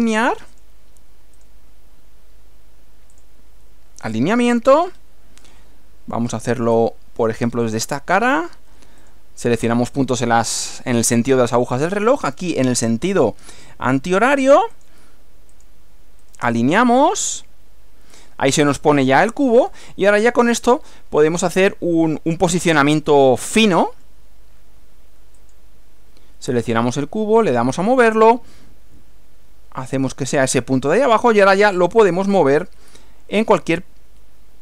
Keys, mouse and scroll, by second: 0.5 click, 1.4 click, 3.1 click, 4.8 scroll up 1, 5.4-6.5 middle drag, 6.8 shift+middle click, 7.4 shift+scroll up 1, 8.4 click, 9.0 click, 9.6 click, 13.5 click, 14.7 click, 15.5 click, 16.2 right click, 16.9 click, 19.4 scroll up 2, 19.8 scroll down 1, 20.8-22.4 middle drag, 23.0-24.2 middle drag, 25.4 click, 27.4 click, 30.2 click.